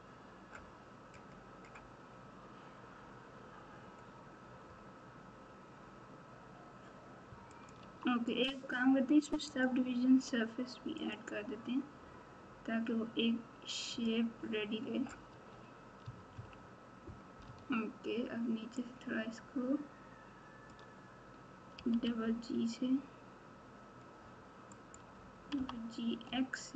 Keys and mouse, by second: 7.8 Tab, 9.6-11.2 drag, 14.0-15.3 drag, 15.3 Tab, 16.0 Tab, 16.3 KP_1, 17.4 Tab, 18.7 click, 19.0-20.7 drag, 21.7 g, 25.5 g.